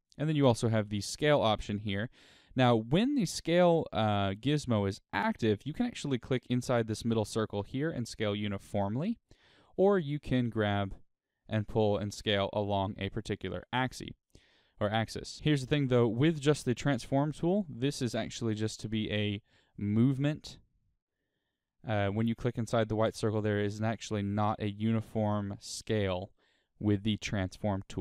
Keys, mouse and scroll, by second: 0.0 click, 7.7-15.9 drag, 19.8-22.9 drag, 22.9 right click, 23.5-28.0 middle drag, 24.3-25.3 scroll up 2, 25.3-25.8 scroll down 2.